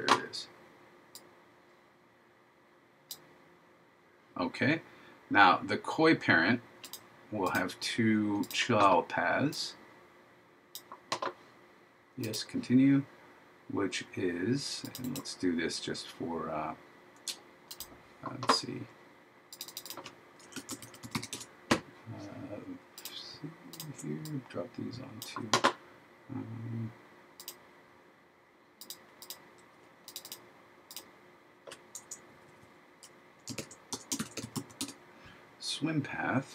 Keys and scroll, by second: 20.7 shift+p, 33.6 shift+w, 34.3 shift+s.